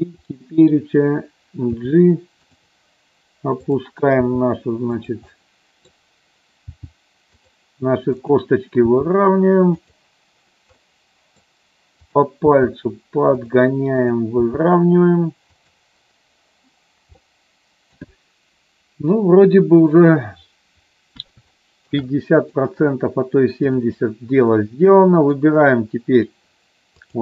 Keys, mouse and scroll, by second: 0.2 click, 1.7 g, 2.4 click, 3.5 click, 4.2 g, 4.9 click, 5.2 middle click, 6.7 g, 7.3 click, 8.2 click, 8.8 g, 10.8 middle click, 12.0 click, 12.3 g, 13.3 click, 14.1 click, 14.3 g, 15.6 click, 17.2 middle click, 21.4 shift+middle click, 22.0 middle click, 24.5 middle click, 26.9 click.